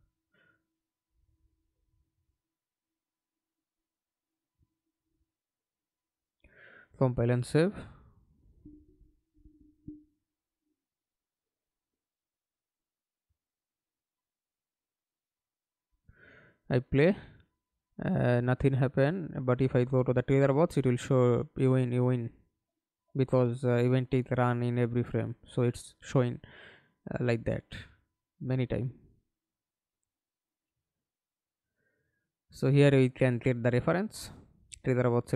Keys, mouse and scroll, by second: 4.5 alt+click, 7.4 right click, 13.4 F11, 13.9 alt+p, 15.3-20.6 typing, 23.2-24.3 typing, 24.7 Escape, 25.5 middle click, 26.4 F11, 29.8 right click, 30.7 right click, 34.0 Delete, 34.7 right click.